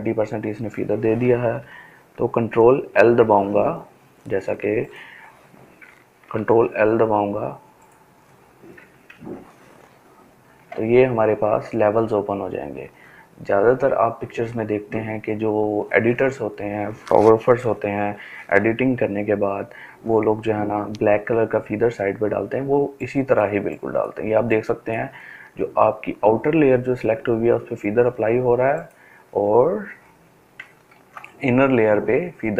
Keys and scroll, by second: 1.5 ctrl+l, 4.9 ctrl+l, 7.7 ctrl+l, 29.6 ctrl+d.